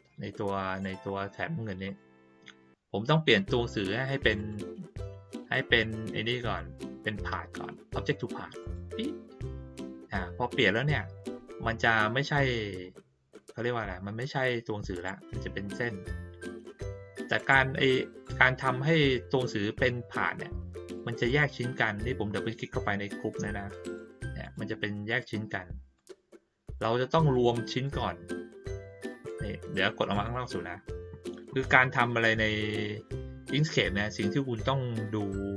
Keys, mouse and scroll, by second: 0.5-0.9 middle drag, 1.8 click, 4.3 click, 8.6 click, 14.9 click, 17.3 click, 20.9 click, 21.2 click, 23.8 click, 24.4 click, 25.0 click, 25.9 click, 26.6 click, 27.2 click, 27.7 click.